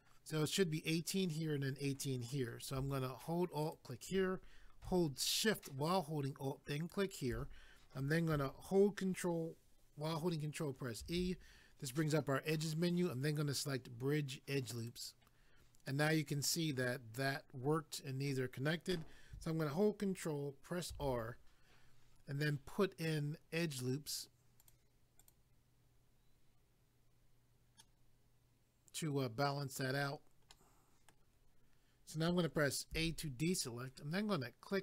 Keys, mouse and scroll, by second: 3.6 alt+click, 3.7 alt+click, 11.0 ctrl+e, 14.8 click, 14.9 click, 15.9 middle click, 20.9 ctrl+r, 21.6-23.3 scroll up 1, 24.6 click, 24.7 click, 25.2 click, 25.3 click, 27.8 middle click, 30.5 middle click, 32.9 a.